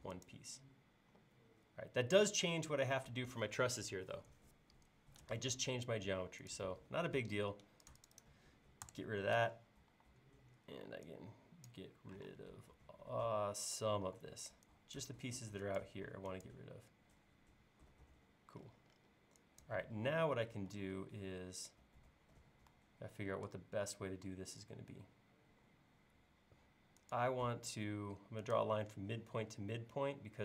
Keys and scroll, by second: 8.9 BackSpace, 9.9 e, 12.3 space, 14.1 e, 20.7 l.